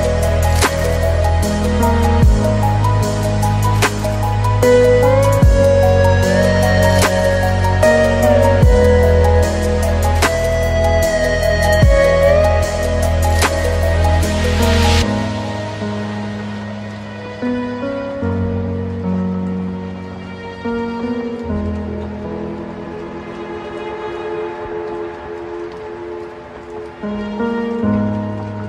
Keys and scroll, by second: 3.1 alt+BackSpace, 4.8 ctrl+BackSpace, 5.4 ctrl+d, 8.7 ctrl+z, 11.3 ctrl+alt+space, 11.7 ctrl+0.